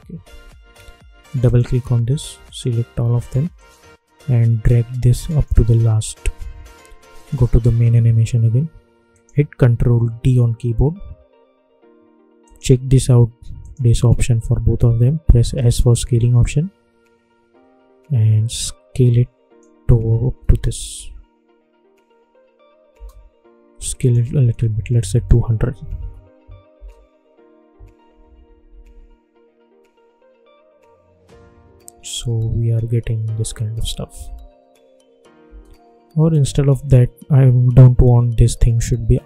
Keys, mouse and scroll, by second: 1.2 click, 3.5-7.1 shift+drag, 9.9 ctrl+d, 12.4 click, 15.4 s, 16.3-20.4 drag, 20.4 space, 22.9 space, 23.9 click, 25.9 Return, 26.7 space, 35.4 space, 36.2 click.